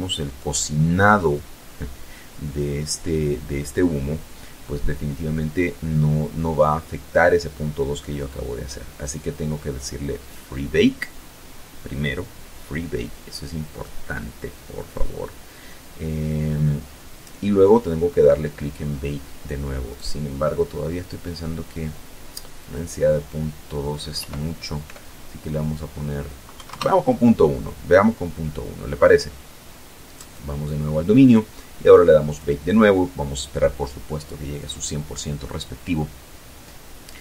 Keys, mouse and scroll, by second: 8.1 click, 17.8 right click, 20.4 click, 22.0 End, 23.2 BackSpace, 24.3 KP_1, 24.5 KP_Enter, 28.0 right click, 29.3 scroll down 1, 30.1 click.